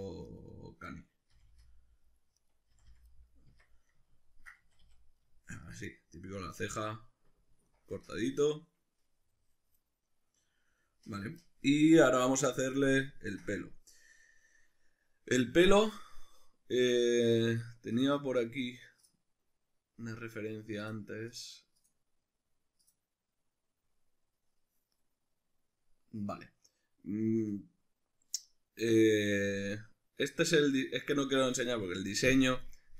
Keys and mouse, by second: 0.3 right click, 1.1-2.4 middle drag, 1.3 f, 2.4 right click, 2.7 f, 3.1-11.8 middle drag, 3.5 Tab, 4.6 a, 11.8 right click, 12.3-32.9 middle drag.